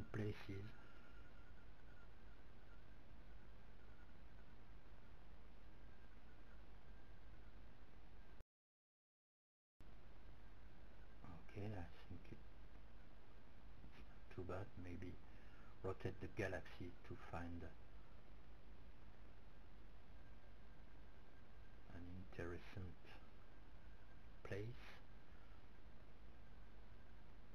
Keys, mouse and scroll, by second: 3.6 click, 3.8 g, 10.9-12.8 right drag, 12.1 r, 21.1-24.6 middle drag.